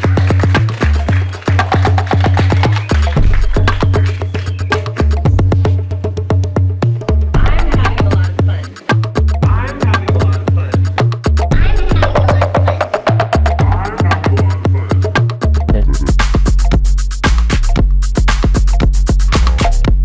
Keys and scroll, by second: 11.3 s, 12.5 space, 13.3 shift+c, 15.1 s, 18.7 Escape, 19.7 space.